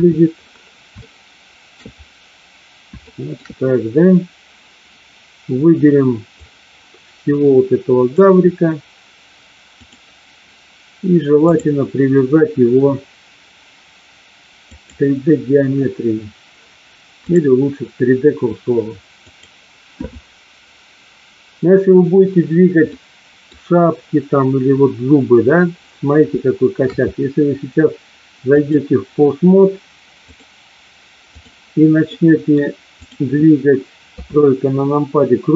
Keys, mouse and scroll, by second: 1.0-1.7 shift+middle drag, 3.0 shift+middle click, 6.5-8.1 drag, 9.7 click, 11.5-15.0 drag, 17.2-19.5 drag, 22.9-23.5 middle drag, 26.2-26.9 shift+middle drag, 28.5 click, 30.4-31.5 drag, 32.0 middle click, 34.1 KP_3.